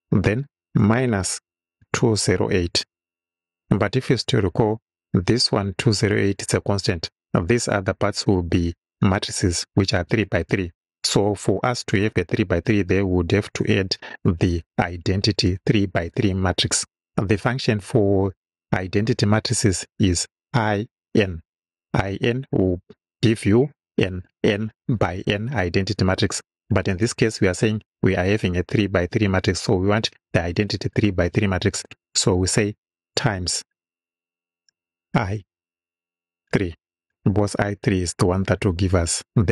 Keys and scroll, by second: 0.8 -, 1.8 2, 2.2 0, 3.6 8, 34.0-37.0 typing, 38.5 3.